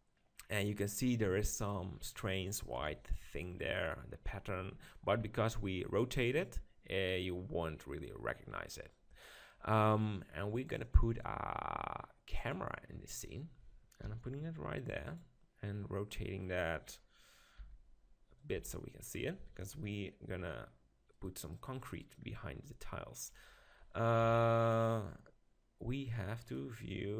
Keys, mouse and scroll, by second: 1.5-2.8 middle drag, 2.8 KP_7, 6.0-8.9 middle drag, 10.6-12.6 drag, 14.0 g, 16.8 KP_3, 18.4 r, 18.5-20.3 drag, 18.6 g, 19.6 KP_0, 23.1-24.2 right drag, 24.2 click, 24.2 KP_7.